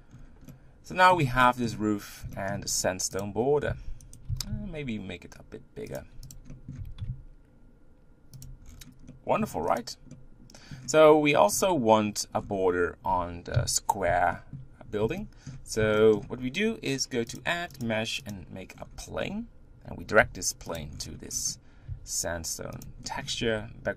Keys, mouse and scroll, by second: 0.2 scroll down 2, 0.5-1.9 middle drag, 1.9-2.4 scroll up 3, 2.4 shift+middle click, 3.2 click, 3.4 scroll up 2, 3.7 s, 4.3 s, 6.4 click, 6.5 middle click, 6.8 g, 8.6-9.2 scroll down 7, 9.2 middle click, 9.8 click, 10.2-11.5 middle drag, 11.5-12.4 scroll up 5, 12.4-13.5 scroll down 5, 13.5 KP_1, 14.3-16.3 shift+middle drag, 16.3-18.3 scroll up 4, 18.3 click, 18.7-19.6 scroll down 11, 20.2 g, 20.9-21.7 scroll up 12, 21.9 g, 23.0 shift+middle click, 23.4 scroll up 1, 23.5 Tab.